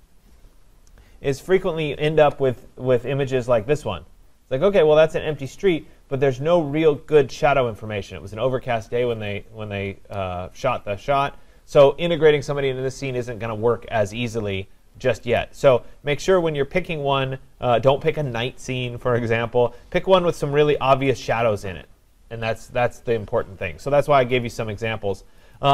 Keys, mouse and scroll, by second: 0.0-1.0 typing, 0.5-2.2 drag, 4.9 typing, 5.6-10.7 drag, 15.4 click, 16.8-17.5 scroll, 17.5-18.2 scroll, 18.8-19.3 scroll down 4, 19.3-20.2 scroll, 20.2 scroll, 21.1-22.6 scroll, 22.6 scroll, 25.6 click.